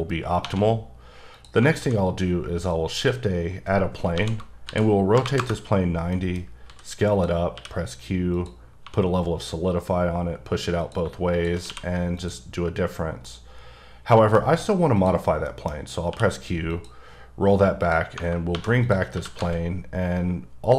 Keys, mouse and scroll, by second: 0.4 1, 1.3 click, 1.8 shift+a, 2.7 click, 4.1 KP_1, 4.7 r, 5.1 KP_9, 5.4 KP_Enter, 6.1 middle click, 6.7 s, 7.1 click, 7.5 q, 8.3 click, 8.8 2, 10.8 click, 11.6 q, 12.1 click, 12.8-13.3 scroll down 1, 13.5 middle click, 14.3 scroll down 1, 15.0 click, 15.5 middle click, 16.1 q, 16.7 click, 17.3-17.8 scroll down 1, 17.8 click, 18.5 2, 18.8 click, 19.1 g, 19.4 z.